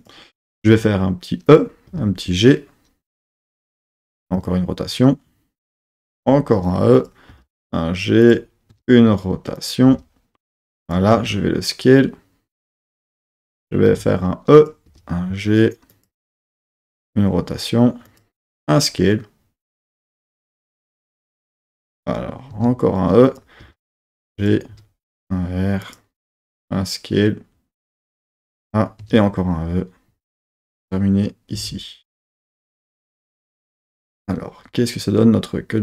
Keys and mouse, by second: 0.0 click, 0.7 e, 1.5 click, 1.9 g, 3.7 click, 4.0 r, 5.6 click, 6.1 e, 6.9 click, 7.3 g, 8.2 click, 8.7 r, 9.6 click, 9.8 g, 10.8 click, 11.1 s, 12.9 click, 13.9 e, 14.6 click, 14.9 g, 15.9 click, 18.1 click, 18.4 s, 20.1 click, 20.6 g, 21.5 click, 22.5 e, 23.3 click, 23.6 g, 24.4 click, 24.7 r, 25.8 click, 26.1 s, 28.2 click, 29.0 e, 30.7 click, 31.5 r, 32.3 click.